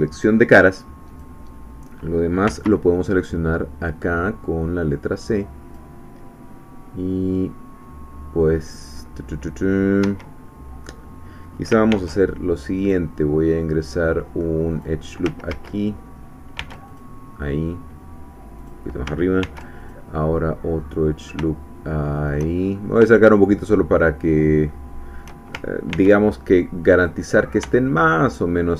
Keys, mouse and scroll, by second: 1.1 click, 2.5 c, 3.0-5.9 drag, 10.0 Escape, 11.9 ctrl+r, 12.9 click, 14.7 click, 15.6 ctrl+z, 16.6 ctrl+r, 16.9 ctrl+click, 18.6 click, 19.4 ctrl+r, 19.8 ctrl+click, 22.1 shift+click, 22.6-23.1 shift+scroll up 4, 23.2-24.4 shift+middle drag, 24.7 shift+middle click, 25.9 ctrl+r, 27.1 click.